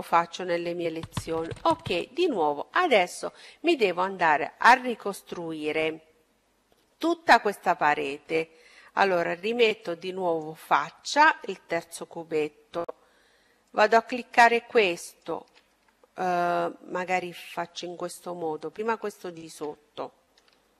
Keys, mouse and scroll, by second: 8.2-10.0 drag, 10.8 middle click, 12.1-15.4 right drag, 14.2-15.9 middle drag, 15.9-17.7 right drag, 17.1-20.7 middle drag, 20.2-20.7 right drag.